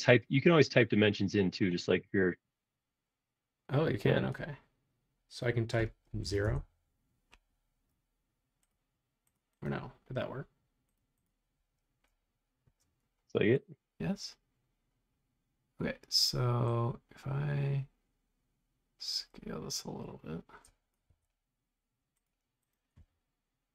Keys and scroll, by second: 6.2 0, 6.4 Return, 21.1 Escape.